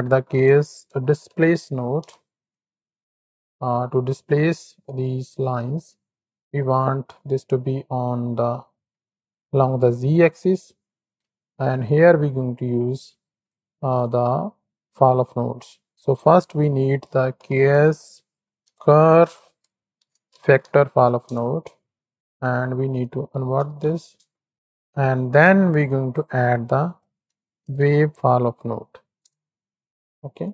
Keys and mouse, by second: 5.0 shift+click, 6.4 click, 7.8 click, 8.3-8.7 ctrl+drag, 9.8-10.3 middle drag, 11.8-13.9 drag, 14.2-15.3 drag, 16.1-22.2 drag, 23.0-24.0 drag, 25.1 click, 26.0-30.5 drag.